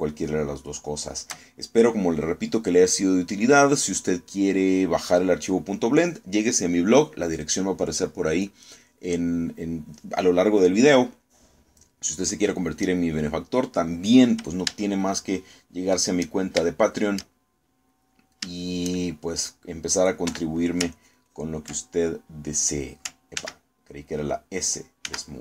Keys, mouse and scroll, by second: 0.7 shift+middle click, 1.9 shift+click, 12.3 click, 13.2-15.0 drag, 15.9 shift+middle click, 16.7 shift+middle click, 17.7 shift+middle click, 19.0 middle click, 19.9 shift+middle click, 21.3 3, 22.0 ctrl+click, 24.5 ctrl+z.